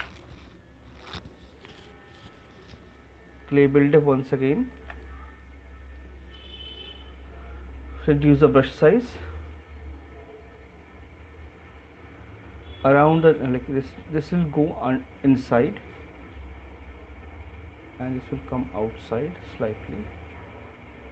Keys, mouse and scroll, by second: 4.9 click, 5.0 middle click, 5.0 right click, 6.3 click, 6.9-8.9 typing, 9.9 click, 11.6 click, 12.5 click, 13.2 click, 16.6 alt+click, 17.8 alt+click, 18.6 click, 19.0 click, 19.2 click, 20.1 click, 20.5 click, 20.8 alt+click, 21.0 click.